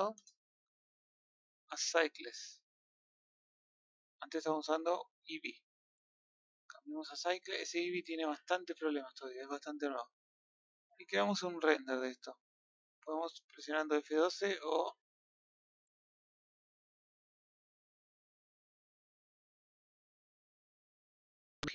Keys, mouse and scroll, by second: 0.1 KP_0, 6.2 drag, 7.2-7.6 scroll up 2, 8.6 n, 9.9 t, 10.7-11.0 scroll up 2.